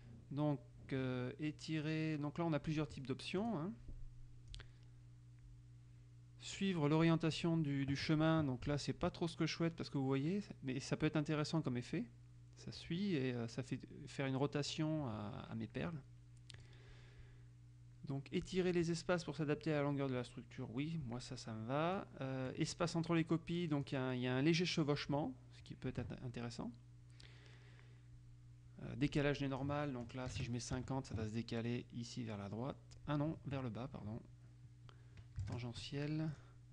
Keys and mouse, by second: 3.6 click, 4.6 click, 7.6 click, 16.8 click, 22.1-23.2 drag, 24.0 click, 29.6 click, 30.5 KP_0, 30.9 Tab, 35.6 KP_5, 36.4 click.